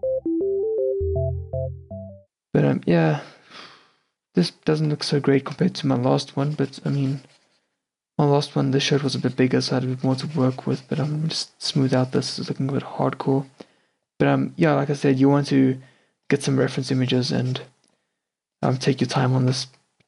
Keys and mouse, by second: 0.0-0.8 typing, 2.1 n, 5.1 f, 5.5 s, 6.2 s.